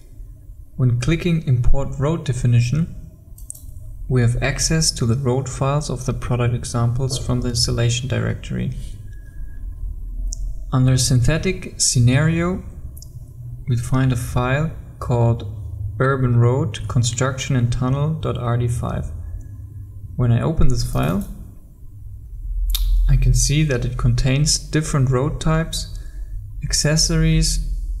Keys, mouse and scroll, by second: 9.8-12.4 scroll up 1, 13.5-17.5 scroll down 1, 21.0 click, 27.3-27.8 scroll up 1.